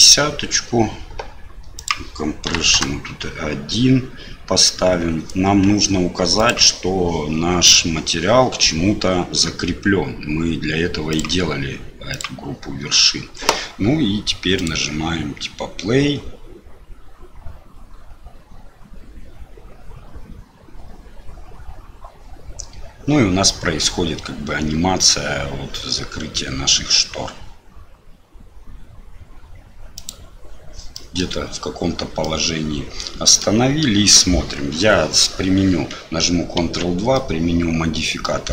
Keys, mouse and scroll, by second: 1.8-3.2 drag, 6.3 click, 11.1-12.3 drag, 14.6 click, 30.2 click, 30.9 middle click, 32.2-33.4 middle drag, 36.7 ctrl+2, 37.1-38.2 middle drag.